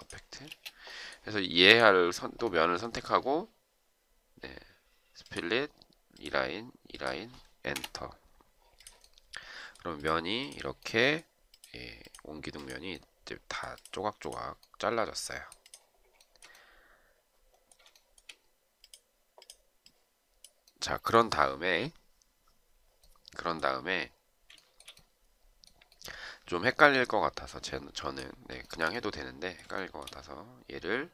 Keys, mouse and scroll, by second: 0.4 space, 7.6 Return, 16.1 shift+right click, 17.9 shift+right click, 24.5 shift+right click, 28.6 shift+right click, 29.7 shift+right click.